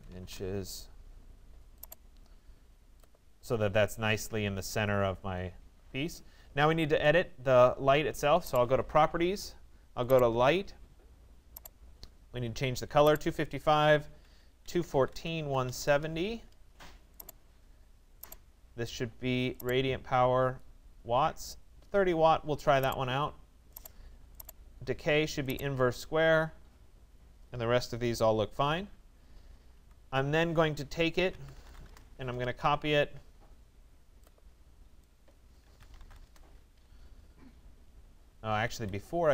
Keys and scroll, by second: 0.2 Return, 13.8 Tab, 14.4-15.9 typing, 31.7 y, 31.9 Return, 35.8 Return, 38.8 Escape.